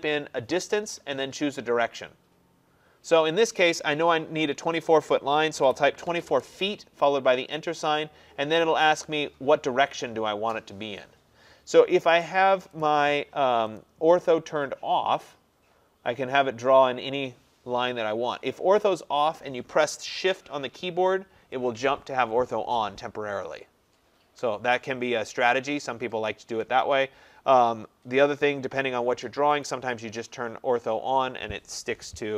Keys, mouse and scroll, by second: 5.6-6.1 typing, 6.3 Return, 12.3 click, 13.8 click, 20.3 click, 29.7 click, 32.2-32.3 drag.